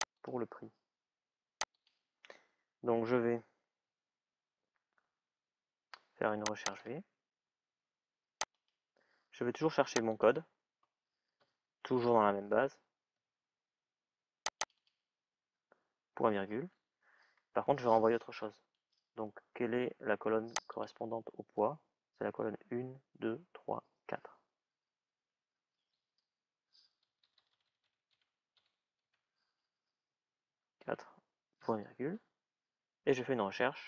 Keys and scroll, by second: 26.9 typing, 30.1 shift+'.